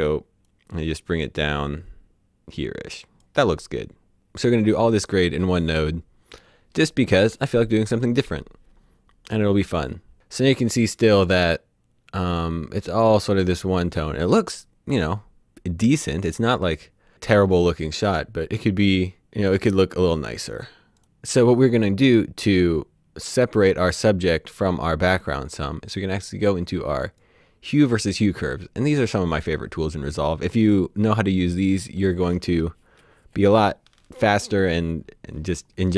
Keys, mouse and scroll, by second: 20.7 click, 27.1 click.